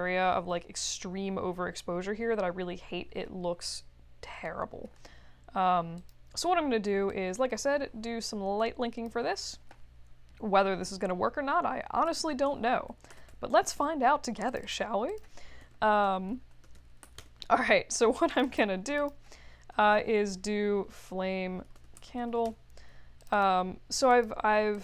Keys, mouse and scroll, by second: 3.5-4.5 middle drag, 5.9 click, 7.0-9.0 drag, 12.0 click, 13.1 ctrl+d, 14.4 click, 14.6 click, 15.0 click, 15.6-17.5 typing, 18.3 click, 18.9 click, 19.9 BackSpace, 21.4-22.7 typing, 23.2 click, 23.3 click, 24.1 click, 24.7 click.